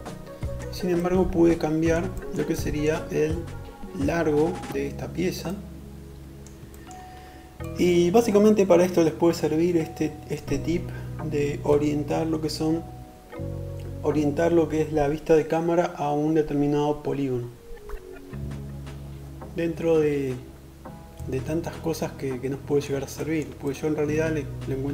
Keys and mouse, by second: 1.2 drag, 4.2-24.1 drag, 24.1-24.9 middle drag.